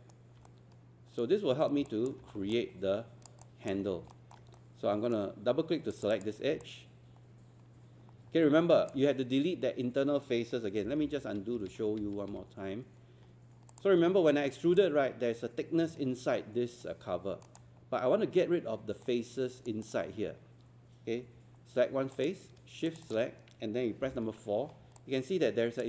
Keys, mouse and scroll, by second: 0.5 right click, 1.9 alt+click, 2.3 scroll down 1, 2.6 alt+click, 3.4 alt+click, 3.9 scroll up 1, 4.1 alt+middle click, 4.6-5.9 right drag, 5.9 click, 6.6-8.9 alt+drag, 10.8 z, 13.3 scroll up 1, 13.7 click, 14.0 scroll down 1, 14.8-17.8 alt+drag, 17.8 scroll up 1, 19.0 right click, 19.8-21.0 drag, 22.9 shift+click, 24.0 shift+4, 24.6 scroll down 1, 25.0 alt+click.